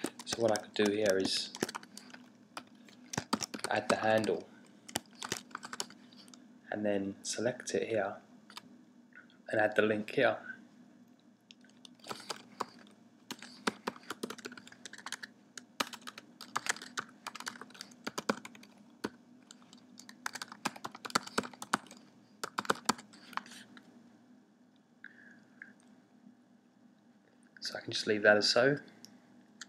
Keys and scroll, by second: 0.0-7.6 typing, 11.9-23.4 typing.